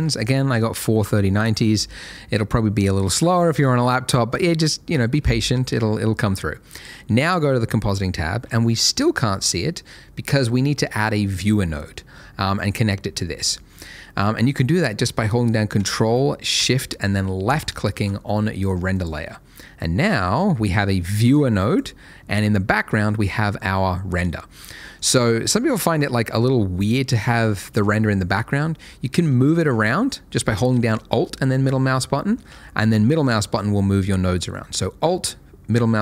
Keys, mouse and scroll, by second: 7.2 click, 12.6 click, 16.6 ctrl+shift+Caps_Lock, 17.4 ctrl+shift+click, 18.9 click, 22.8 middle click, 25.9 click, 32.7 middle click.